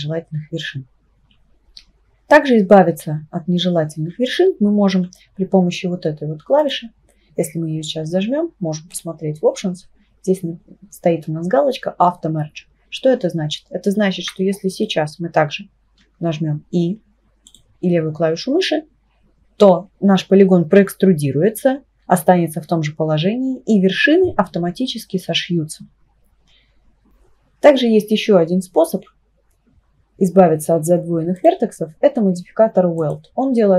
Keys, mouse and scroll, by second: 6.6 click, 8.9-12.1 drag, 12.8 Tab, 13.4 Tab, 14.2 3, 14.7 click, 16.0 e, 31.4 click, 33.1-33.7 drag.